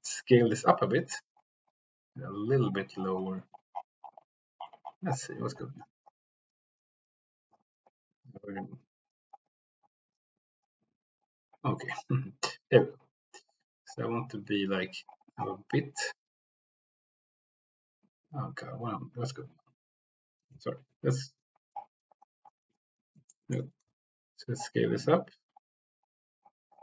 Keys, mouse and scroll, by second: 20.5 Escape, 23.2 shift+click, 23.8 s.